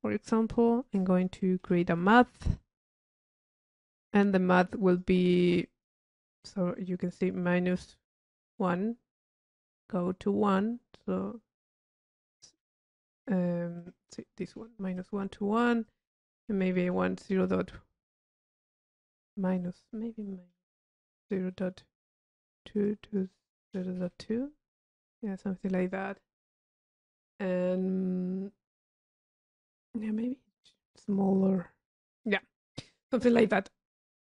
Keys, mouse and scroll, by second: 0.7 click, 3.2 click, 5.8 click, 6.7-7.9 middle drag, 6.7 scroll up 1, 15.1 click, 16.0-16.4 drag, 16.7-18.9 drag, 23.0-23.4 drag, 25.3 click, 25.3 middle click, 25.4 click, 25.9 click, 30.6-31.6 drag, 31.8 click, 32.9-34.2 middle drag.